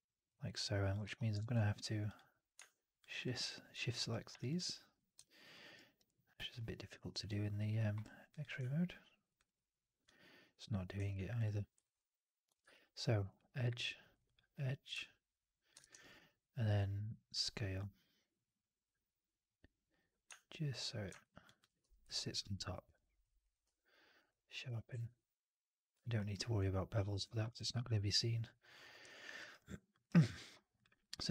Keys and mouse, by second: 0.2 alt+right drag, 0.5 alt+drag, 0.7 alt+click, 0.9 3, 1.3 shift+x, 2.0 click, 3.0 shift+click, 4.0 click, 5.1 alt+click, 5.4 alt+middle click, 5.6 alt+right click, 5.9 alt+click, 6.5 alt+middle click, 7.1 alt+click, 7.6 alt+middle click, 8.2 click, 9.3 shift+click, 9.9 click, 11.7 alt+right click, 11.8 alt+click, 13.0 click, 13.2 click, 14.1 click, 15.2 alt+click, 15.7 shift+x, 15.9 alt+right click, 16.0 click, 18.8-21.0 drag, 21.1 alt+right click, 21.3 alt+click, 21.7 4, 22.0 drag, 22.2 right drag, 22.4-23.1 drag, 23.3 click, 23.5 q, 24.8 q, 25.9 alt+middle drag, 26.1 alt+right drag, 26.2-27.0 alt+drag, 27.2 middle drag, 27.3 right drag, 27.5 right drag, 27.7-28.6 alt+drag, 29.0 alt+drag, 29.3 alt+right drag, 29.5-29.8 alt+drag, 29.9 alt+right drag, 30.1 alt+drag, 30.7-31.3 drag.